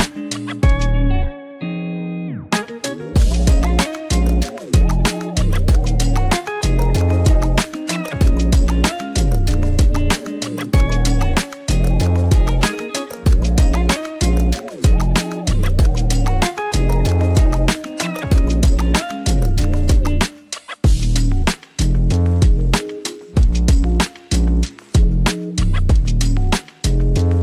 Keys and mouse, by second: 0.1 click, 0.6 r, 1.4 click, 1.9 g, 2.3 click, 2.7 click, 3.9 g, 6.0 click, 8.3 click, 9.6 s, 10.6 click, 10.9 g, 13.6 click, 14.1 shift+middle click, 18.1 r, 19.1 click, 20.5 g, 22.6 middle click, 24.6 click, 25.1 shift+middle click.